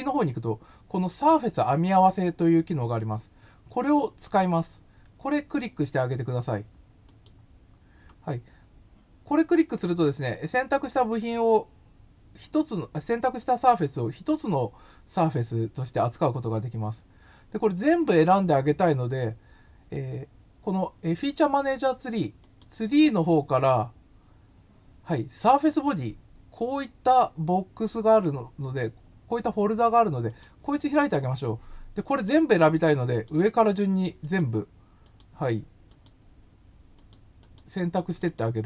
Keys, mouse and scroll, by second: 7.0 click, 22.4 click, 30.2 click, 32.1 click, 33.1 click, 34.2 click, 35.0 click, 35.8 click, 36.9 click, 37.3 click, 38.1 click, 38.2 click.